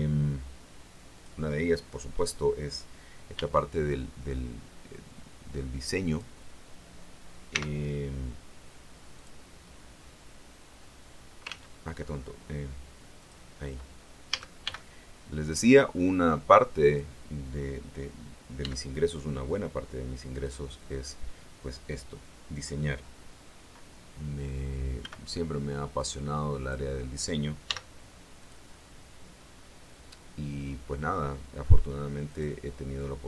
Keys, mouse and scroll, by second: 1.0 click, 3.2 b, 3.8-6.3 drag, 7.4 x, 9.1 click, 11.4 ctrl+z, 13.1 click, 14.2 a, 14.5 b, 15.4-17.1 drag, 18.5 x, 20.2 click, 24.9 b, 25.9 click, 27.5 x, 28.3 click, 30.0 middle click, 32.1 click.